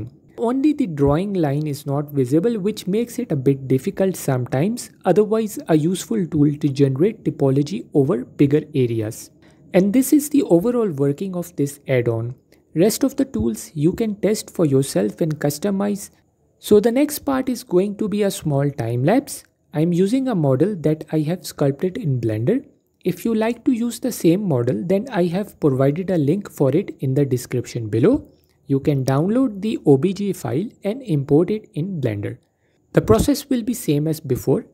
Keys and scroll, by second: 2.1 typing, 4.6 typing, 9.8-10.5 typing, 13.5 Tab, 16.0 alt+q, 22.2 F4, 26.3 F4, 30.9 shift+a.